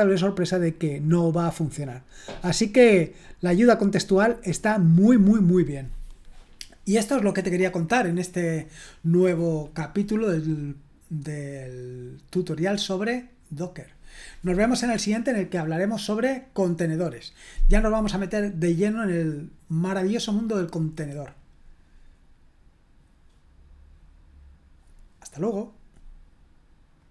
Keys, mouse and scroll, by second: 27.0 click.